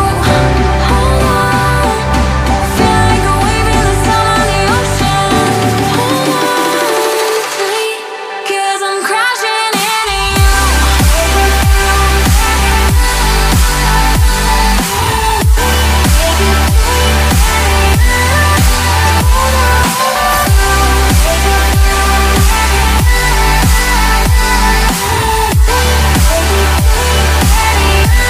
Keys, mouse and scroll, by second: 3.9 ctrl+click, 5.9 ctrl+click, 15.0 double click, 24.7-25.7 typing, 27.7 double click.